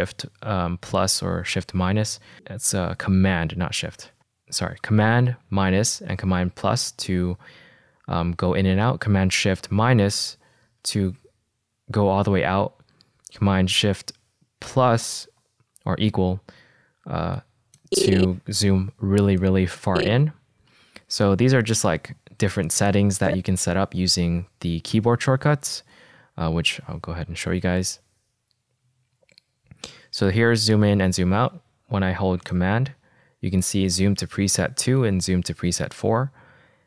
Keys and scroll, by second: 2.3 =, 4.1 -, 5.8 -, 7.2 -, 10.6 -, 15.8 =, 27.3 alt+k.